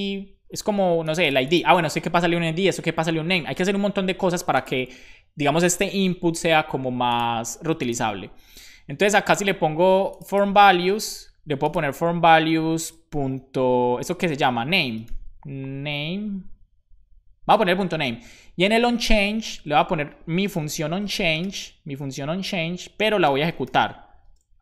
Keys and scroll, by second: 10.5 super+c, 12.6 Left, 12.8 super+v, 13.0 ., 14.6-15.6 typing, 17.9 Right, 18.5 Right, 18.6 Right, 18.8 Right, 18.9 Right, 19.0 Right, 19.2 Right, 19.5 Right, 20.7-22.0 typing, 23.2-24.6 typing.